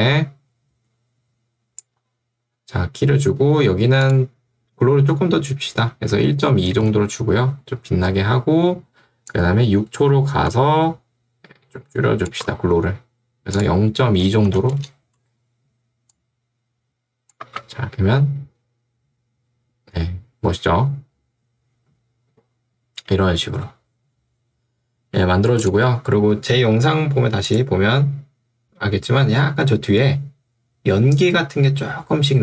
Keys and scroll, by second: 3.2 Escape, 5.9 1, 6.6 2, 6.8 Return, 14.7 2, 14.9 Return, 17.5 space, 23.5 space.